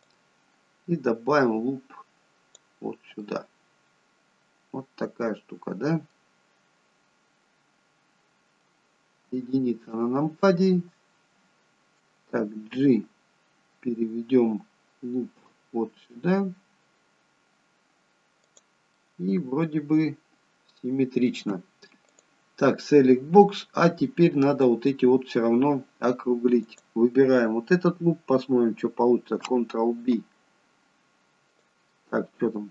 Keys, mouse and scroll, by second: 0.2 click, 3.4 middle click, 6.7-7.1 scroll down 1, 9.3 KP_1, 12.9 g, 19.1 middle click, 22.2 click, 22.7 middle click, 23.9 scroll up 3, 24.2 middle click, 26.8 click, 30.1 ctrl+b, 32.0 middle click.